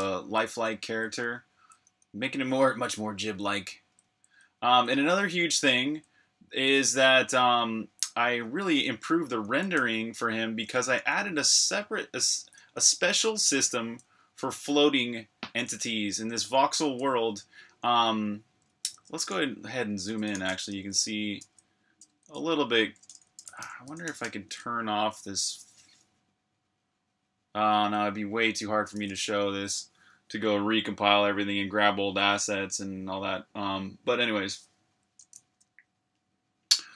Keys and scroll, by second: 0.0-3.6 typing, 4.9-5.9 typing, 7.8-9.8 typing, 11.0-12.3 typing, 13.5-14.2 typing, 17.8-18.7 typing, 19.0 super+q, 20.1-22.0 typing, 23.1-24.7 typing, 28.9 super+r, 29.0-30.1 typing.